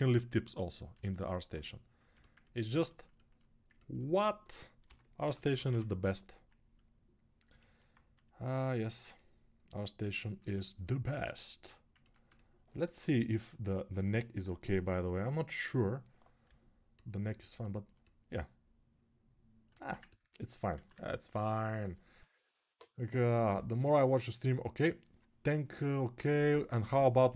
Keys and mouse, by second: 0.7-2.8 alt+shift+drag, 4.6 g, 5.0 ], 5.1 ], 10.2-20.6 alt+shift+drag, 20.6 alt+q.